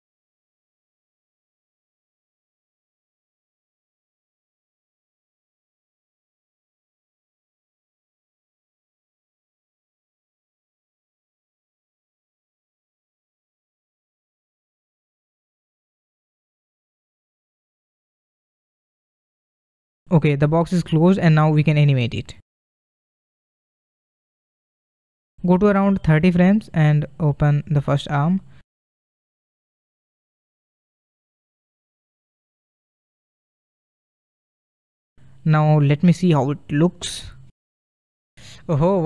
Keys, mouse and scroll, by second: 3.1-4.0 middle drag, 4.0 click, 4.4-6.1 middle drag, 6.1 r, 12.5 click, 13.9 r, 19.5 scroll down 1, 19.7-22.2 middle drag, 22.2-23.4 scroll up 1, 23.4-24.6 scroll up 1, 24.6-27.6 drag, 27.6-30.4 middle drag, 30.4 r, 35.8-37.5 drag, 37.5 space, 38.8 space.